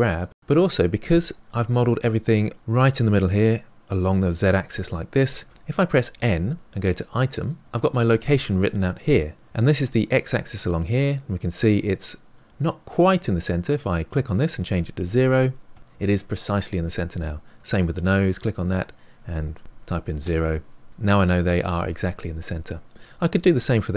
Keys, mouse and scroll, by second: 1.5-3.4 scroll down 4, 6.1 n, 7.3 click, 14.0-16.4 drag, 17.5 click, 18.8-20.9 drag, 23.3 click.